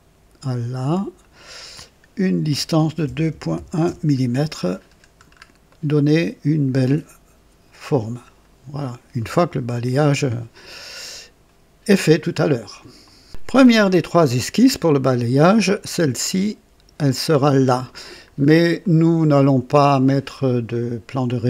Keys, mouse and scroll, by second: 0.9 click, 2.5 l, 3.0 KP_2, 3.3 KP_Decimal, 3.5 KP_1, 3.8 KP_Enter, 4.7-5.5 scroll down 3, 5.7 right click, 13.0 click, 14.3 scroll up 2, 18.3-18.6 scroll down 2, 18.8-19.5 right drag.